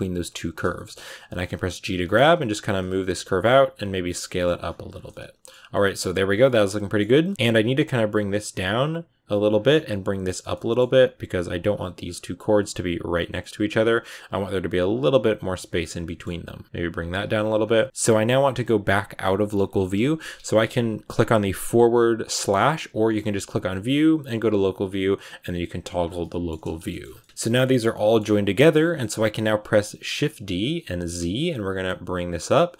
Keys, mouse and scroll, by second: 0.0 right click, 0.2 middle click, 1.0 g, 1.9 middle click, 2.1 g, 2.8 s, 3.4 g, 4.0 scroll down 2, 4.1 middle click, 4.6 g, 4.9 middle click, 5.5 a, 5.6 middle click, 6.1 scroll down 4, 6.3 middle click, 7.0 scroll up 1, 7.1 middle click, 7.3 g, 7.7 right click, 8.0 g, 9.0 right click, 9.2 g, 9.9 right click, 10.0 g, 10.4 middle click, 11.3 right click, 11.6 g, 12.4 right click, 12.7 shift+right click, 12.8 g, 13.9 right click, 14.2 g, 15.4 right click, 15.5 g, 15.9 middle click, 16.5 right click, 16.6 g, 17.1 r, 17.2 g, 17.5 scroll down 2, 17.6-21.2 middle drag, 21.2 /, 25.9 scroll down 4, 26.1 middle click, 26.4-27.1 scroll up 4, 26.8 shift+middle click, 27.1 middle click, 27.2 scroll down 2, 27.5 middle click, 28.1 a, 30.0 shift+d.